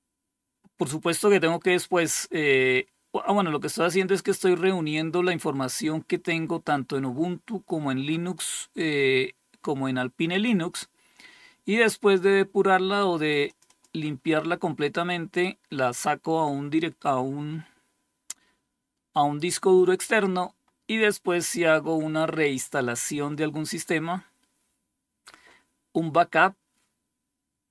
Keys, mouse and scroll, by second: 12.9 click, 13.5 click, 19.4-22.0 scroll down 1, 22.0-22.7 scroll down 1, 22.7-27.7 scroll down 1.